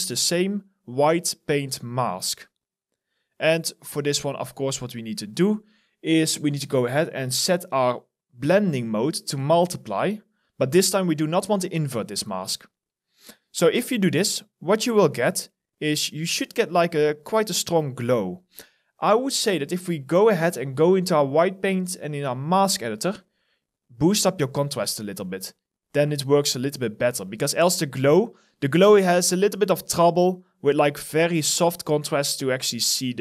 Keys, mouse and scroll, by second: 17.9 alt+right click, 18.7 alt+middle click, 19.7-21.7 scroll down 1.